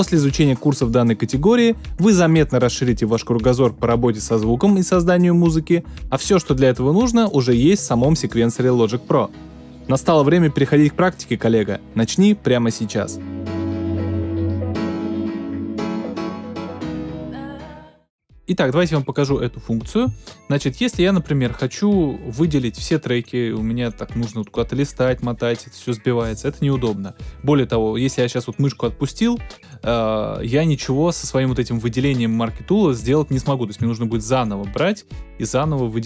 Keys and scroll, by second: 0.6 space, 3.2 space.